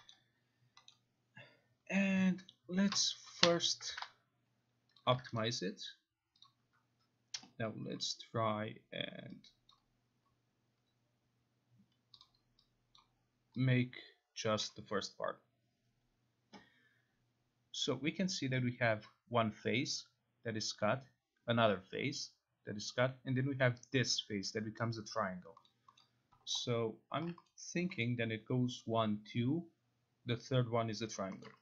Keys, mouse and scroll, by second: 0.2 middle click, 0.9 middle click, 3.4 c, 3.9 ctrl+a, 5.0 click, 5.1 ctrl+a, 5.4 right click, 6.4 click, 7.4 0, 8.0 click, 9.7 click, 12.2 click, 13.0 click, 14.7 click, 25.7 middle click, 26.0 middle click, 27.2 alt+click, 27.5 middle click, 28.0 middle click, 31.4 middle click.